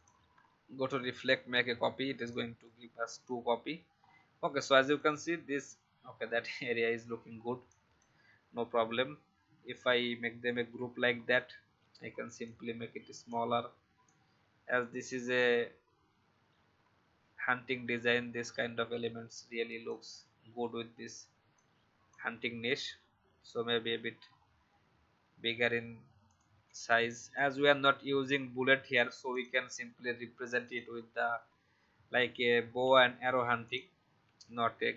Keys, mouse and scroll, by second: 4.0 alt+scroll up 1, 4.9 click, 6.1-6.5 alt+scroll down 1, 7.6-8.8 drag, 10.5 ctrl+g, 11.1 alt+scroll down 1, 12.4-20.0 alt+shift+drag, 21.5 shift+click, 22.8-23.5 shift+Up, 26.2-28.1 drag, 29.3 click, 32.8 ctrl+c, 33.6 click, 34.2 ctrl+v.